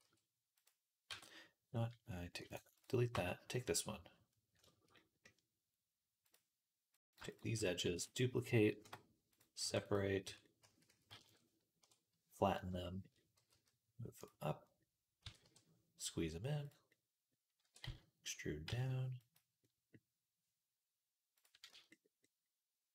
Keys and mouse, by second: 0.9 Tab, 2.2 x, 3.9-6.2 middle drag, 6.2 click, 6.8 shift+middle click, 7.1 shift+click, 7.2-9.7 shift+middle drag, 7.7 shift+d, 8.6 p, 9.5 Tab, 9.7 click, 9.8-12.3 middle drag, 10.1 Tab, 10.5 a, 10.8 s, 11.7 KP_1, 11.7 click, 12.7-14.2 shift+middle drag, 13.5 g, 14.2-16.7 drag, 15.1 s, 16.7-21.2 middle drag, 17.5 e, 21.2-22.9 drag, 21.5 z.